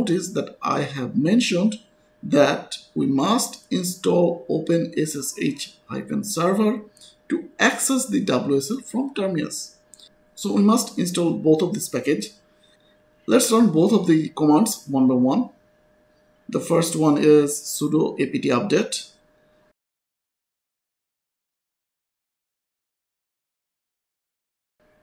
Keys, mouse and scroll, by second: 0.5-2.5 scroll up 1, 3.3-4.6 scroll down 1, 4.6-10.6 scroll up 1, 10.9 click, 13.0 shift+scroll down 1, 13.3-14.4 scroll up 1, 14.4 click, 15.4 ctrl+c, 15.6 click, 16.0 right click, 17.0 Return.